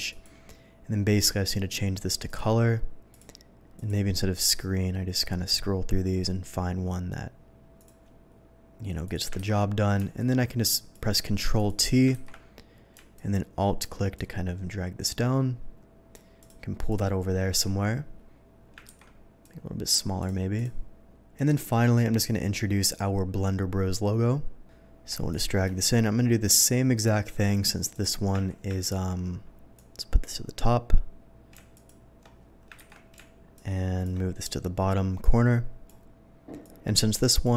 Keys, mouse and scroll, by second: 0.1 alt+click, 2.2 click, 3.1 click, 3.7 click, 7.7 click, 9.0 click, 9.3 ctrl+t, 10.1 alt+click, 11.5 click, 12.1 ctrl+t, 13.1 alt+click, 14.1-16.1 alt+drag, 16.4 alt+click, 16.9 click, 18.9 ctrl+t, 19.4 click, 20.2 click, 20.5 click, 21.3 click, 22.8 click, 25.3 shift+click, 25.7-27.2 shift+drag, 27.9 shift+click, 28.8 ctrl+t, 29.7 ctrl+click, 31.7 alt+click, 32.7 ctrl+t, 33.3 ctrl+alt+t, 33.5 click, 34.4-35.8 drag, 36.6 alt+click.